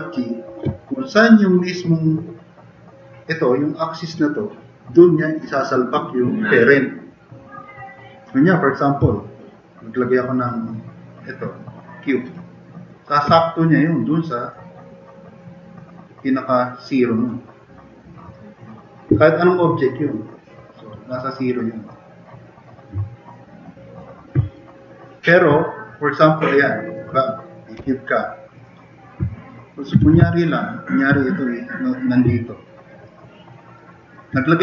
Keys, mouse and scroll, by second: 24.5 click, 25.1 click, 27.8 Delete, 29.3 drag, 30.0 e, 30.3 drag, 30.4 click, 30.6 drag, 31.2-31.8 drag, 32.3 drag.